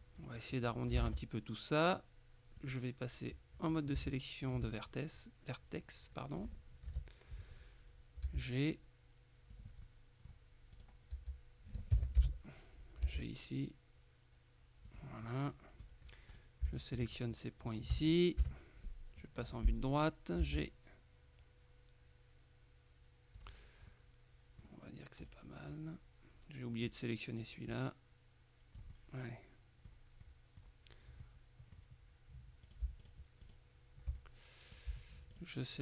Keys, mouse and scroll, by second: 0.3 middle click, 1.1 ctrl+Tab, 2.7 click, 3.8 shift+right click, 4.8 shift+middle click, 7.0 KP_3, 8.3 g, 9.6 click, 11.2 g, 12.0 Escape, 12.3 KP_3, 13.1 g, 15.0 click, 17.1 shift+right click, 17.7 right click, 18.5 KP_3, 20.5 g, 23.4 click, 24.0 middle click, 25.3 right click, 27.7-29.0 drag, 29.0 middle click, 30.3 middle click, 31.3-32.3 middle drag, 32.7 right click, 34.3-35.3 middle drag, 35.4 shift+right click.